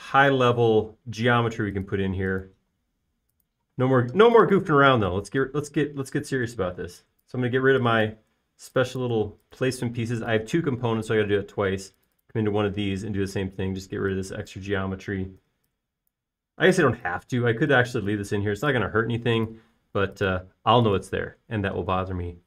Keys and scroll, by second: 5.0 space, 7.6 BackSpace, 8.4 BackSpace, 9.4 BackSpace, 10.3 BackSpace, 16.7-19.3 typing, 21.1 space.